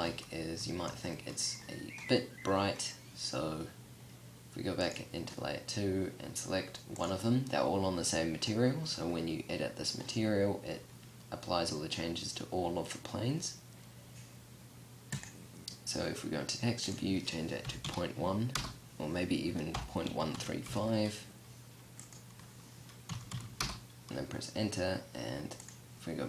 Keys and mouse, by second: 4.1-11.4 drag, 11.4-18.0 middle drag, 18.0-25.9 drag, 25.9 KP_0.